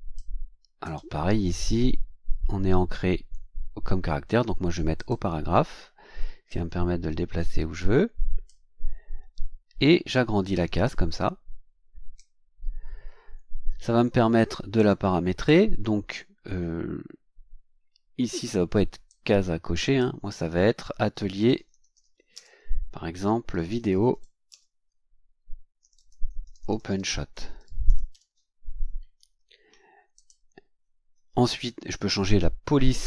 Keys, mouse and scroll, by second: 0.8 right click, 4.9 click, 6.5-8.6 drag, 10.4-12.3 drag, 14.7 click, 19.0-20.1 drag, 20.9-24.6 typing, 25.8 KP_Subtract, 26.0-28.6 typing, 30.1 click.